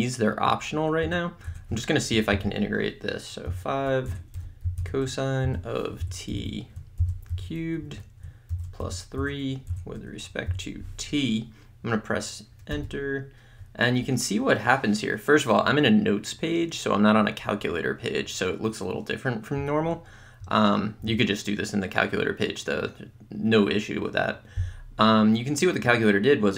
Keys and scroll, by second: 1.1 Tab, 3.5-7.3 typing, 4.2 Tab, 6.4 Right, 7.9 Right, 8.9 3, 9.2 Tab, 10.5 t, 12.7 Return.